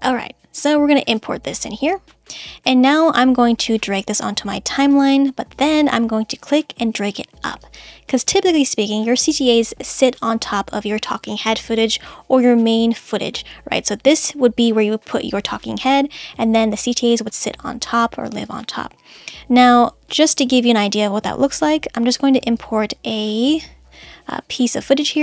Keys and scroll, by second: 0.0 space.